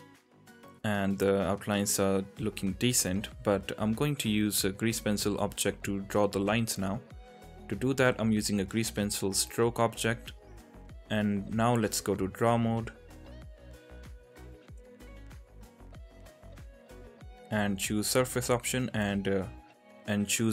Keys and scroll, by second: 8.2 shift+a, 10.7 g, 18.8 ctrl+z.